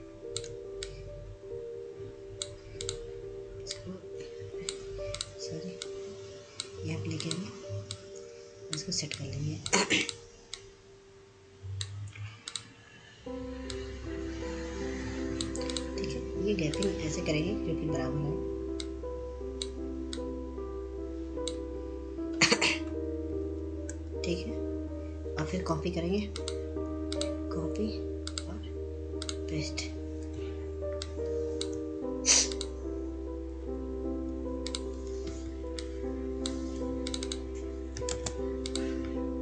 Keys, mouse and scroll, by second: 1.3-14.0 drag, 14.0 scroll up 1, 14.4 click, 20.9 shift+click, 25.0 Right, 26.0 Down, 28.5 click, 33.2-34.8 ctrl+drag, 36.9 scroll down 1, 37.0 click, 37.7 F2, 38.1-39.4 drag.